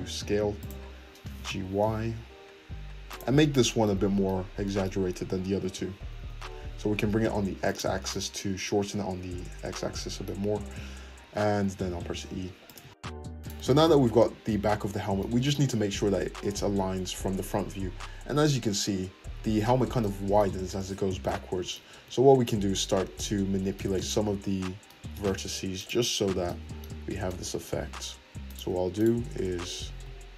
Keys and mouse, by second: 1.2 g, 5.7 g, 10.6 `, 11.2-15.1 drag, 11.7 e, 12.7 Tab, 13.0 Tab, 15.1-21.9 middle drag, 15.6 `, 21.9 Tab, 21.9-23.8 drag, 23.8-25.8 middle drag, 25.8 alt+click, 25.9-28.5 alt+middle drag, 28.5 click, 28.5 middle click, 28.9 click, 29.0-30.3 middle drag.